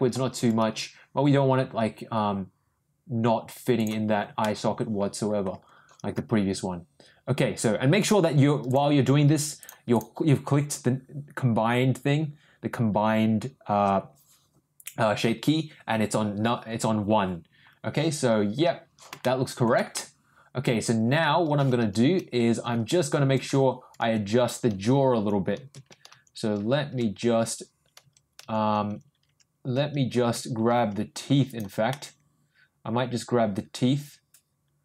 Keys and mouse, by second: 0.4 ctrl+g, 4.4 middle click, 8.0 click, 8.7 click, 9.6 click, 9.9-12.1 drag, 19.2 shift+middle click, 19.9-21.1 middle drag, 31.9-34.8 middle drag.